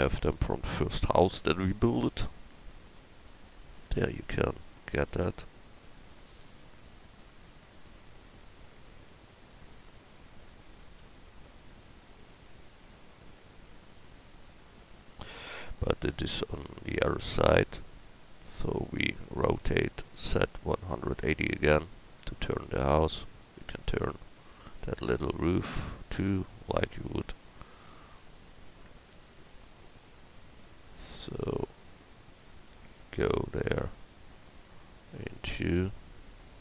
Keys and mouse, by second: 3.2 KP_1, 5.0 shift+d, 11.0 s, 14.5-18.6 middle drag, 18.6 right click, 20.1 r, 22.5 right click, 23.2 middle click, 24.2 middle click.